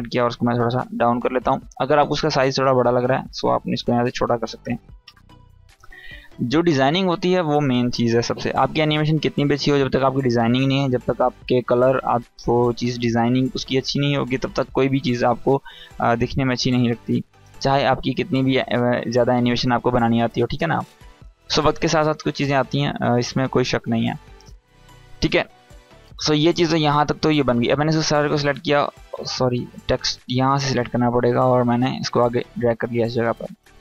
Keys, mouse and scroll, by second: 0.4 Down, 2.7 click, 6.2 Down, 17.1 click, 21.5-26.0 drag, 27.8-28.7 click, 28.7 ctrl+z, 29.6-30.2 drag.